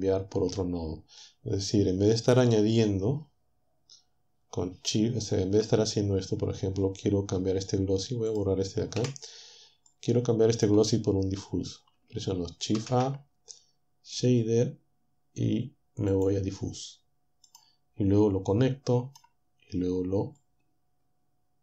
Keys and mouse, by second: 8.3 click, 8.9 Delete, 12.7 shift+a, 16.1 click, 17.5-19.3 drag, 20.4-21.6 drag.